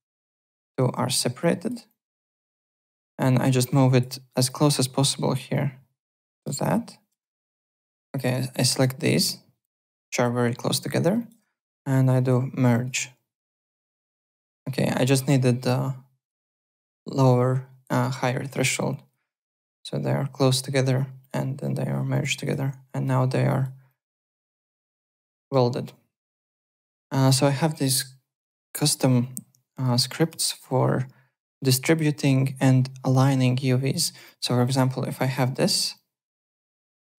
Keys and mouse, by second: 1.0 click, 1.8 click, 2.6 alt+middle click, 2.7 alt+right click, 3.3 click, 4.3 alt+right click, 5.5 click, 7.4 click, 11.2 click, 12.7 click, 14.0 click, 14.1 ctrl+z, 15.1 click, 16.2 click, 19.4 click, 22.1 click, 23.5 click, 24.7 ctrl+z, 25.3 alt+middle click, 25.8 alt+Tab, 26.2 alt+click, 27.3 click, 28.5 Home, 29.7 click, 33.9 click, 34.0-35.4 typing, 34.6 click, 35.9 click, 36.6 click, 36.6 w.